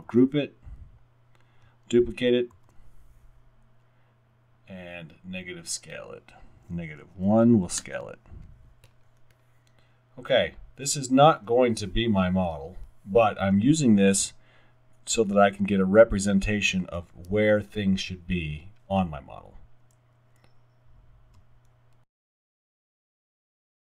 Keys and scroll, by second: 0.1 super+g, 2.6 super+d, 7.0 typing, 7.8 Return.